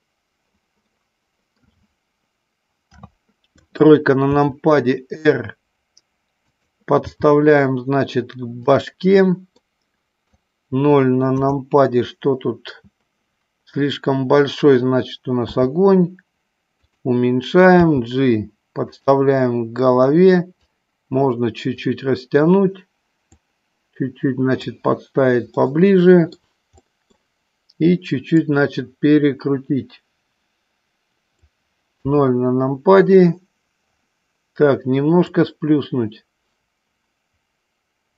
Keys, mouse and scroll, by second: 0.0 click, 0.7 scroll up 1, 1.0 middle click, 2.9 KP_3, 4.4 r, 7.1 g, 9.6 middle click, 11.3 KP_0, 15.3 s, 17.6 g, 20.5-21.8 drag, 23.4-24.6 drag, 25.5-26.5 middle drag, 26.9 middle click, 28.4-31.6 drag, 32.1 KP_0, 35.4-38.1 drag.